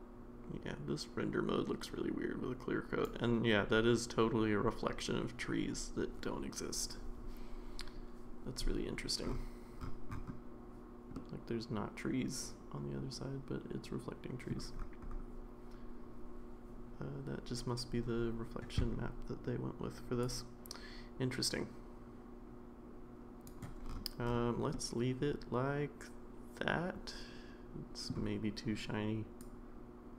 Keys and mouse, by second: 11.1-14.5 middle drag, 20.2-23.4 drag, 24.7-28.1 middle drag, 29.6-30.1 drag.